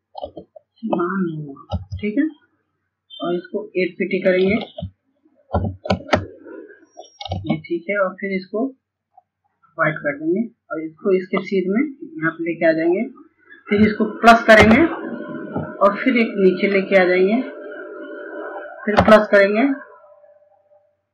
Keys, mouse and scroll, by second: 0.6 Return, 2.4 click, 4.4 KP_8, 6.2 ctrl+space, 6.7 ctrl+space, 7.8 click, 8.7 scroll up 1, 10.1 click, 11.3-12.0 scroll down 1, 12.0-12.5 scroll up 1, 15.5-21.1 drag.